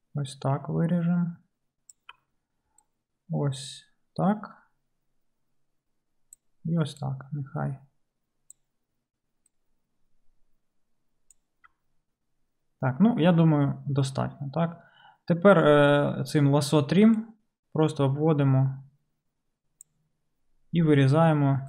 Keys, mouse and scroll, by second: 2.1 d, 2.2 d, 5.8 d, 6.5-11.6 d, 11.9 d.